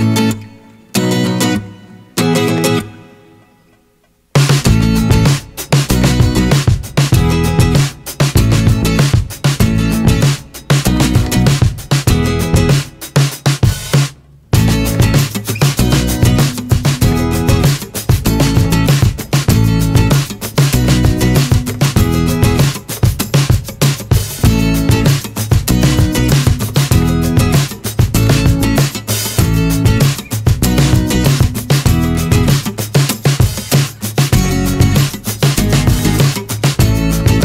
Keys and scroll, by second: 12.3 w, 12.6 3, 24.6 ctrl+z, 27.5 ctrl+z, 33.0 r, 34.2 ctrl+z.